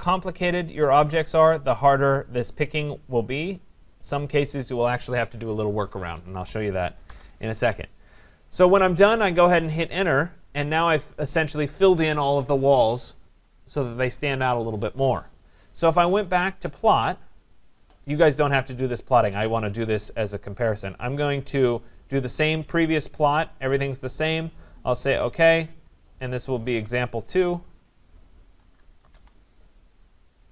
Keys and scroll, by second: 7.1 Return, 29.0 BackSpace.